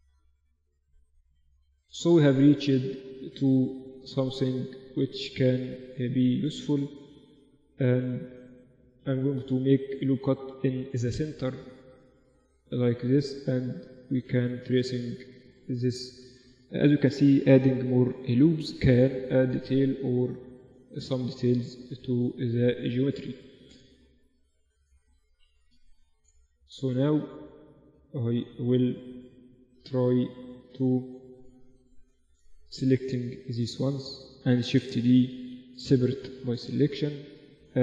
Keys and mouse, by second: 0.9 g, 1.9 middle click, 2.3 Tab, 2.9 Tab, 3.1 Tab, 4.1 Tab, 5.3 ctrl+r, 11.6 middle click, 12.9-14.6 right drag, 13.6-16.7 drag, 15.2-16.6 right drag, 16.7-17.9 right drag, 17.9 click, 18.1-22.1 middle drag, 22.1 Tab, 23.2 z, 25.7 Tab, 26.3 z, 29.3 ctrl+r, 33.2 click, 34.1-35.3 middle drag, 35.3 shift+d, 35.6 click, 35.6 p, 36.6 Tab, 37.3-37.8 drag.